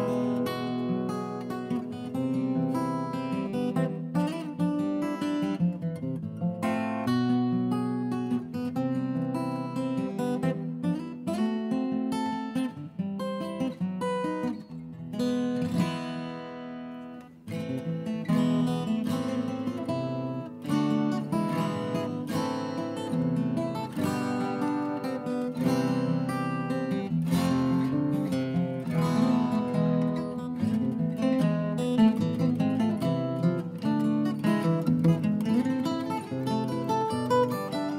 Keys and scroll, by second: 0.0-0.2 typing, 0.6 ctrl+shift+a, 0.8 ctrl+g, 1.9 ctrl+a, 2.0 ctrl+g, 12.7-15.1 typing, 17.9-20.9 typing, 22.8-23.8 typing, 23.8 Delete, 27.5 Delete, 27.7-28.8 typing, 31.4 Delete, 31.4-32.3 typing, 34.9-36.2 typing.